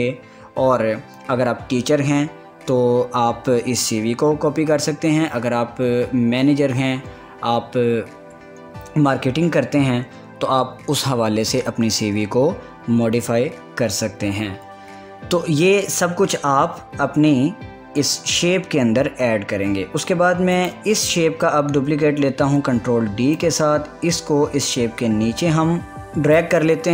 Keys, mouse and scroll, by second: 17.2 scroll down 1, 21.2 click, 23.0 ctrl+d, 24.0-26.9 drag.